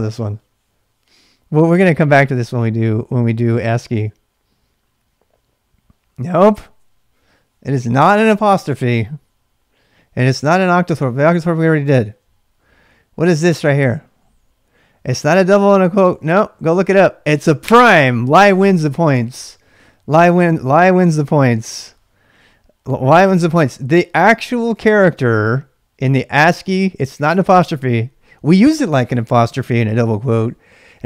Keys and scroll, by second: 11.7 ctrl+[, 11.8 h, 12.0 h, 12.6 h, 13.1 l, 23.2-25.2 typing, 30.5-31.0 typing.